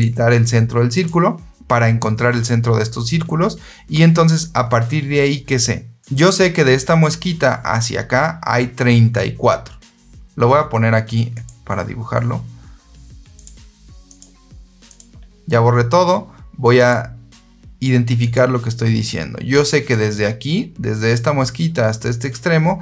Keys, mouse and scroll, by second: 0.8 click, 11.2 click, 13.3 click, 14.8 click, 16.6 click, 18.1 click, 19.8-22.7 drag.